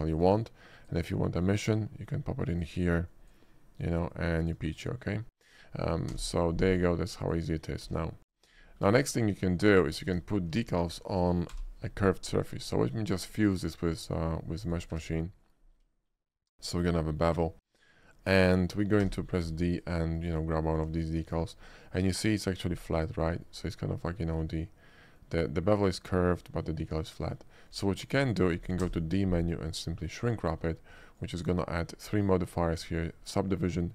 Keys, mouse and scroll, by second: 0.8 click, 1.2 middle click, 1.7 click, 2.6 click, 3.1 click, 4.2 click, 5.5 click, 6.2 d, 6.8 right click, 7.3 click, 7.9 x, 8.3 click, 8.6 middle click, 8.7 shift+middle click, 9.2 shift+middle click, 10.1 Tab, 10.6 alt+Tab, 10.6 click, 11.5 y, 13.1 click, 14.5 middle click, 14.7 click, 15.0 Tab, 15.5 middle click, 16.0 shift+middle click, 16.2 shift+middle click, 16.6 shift+middle click, 16.8 shift+middle drag, 17.1 shift+click, 18.5 shift+click, 19.0 d, 19.8 click, 20.2 click, 20.9 s, 21.7-22.6 middle drag, 22.8 scroll up 1, 23.0-23.5 middle drag, 24.5-25.2 middle drag, 26.4 middle click, 27.8 s, 28.2 click, 28.4 middle click, 28.9 d, 29.8 click, 30.5 shift+middle click, 31.2 shift+click.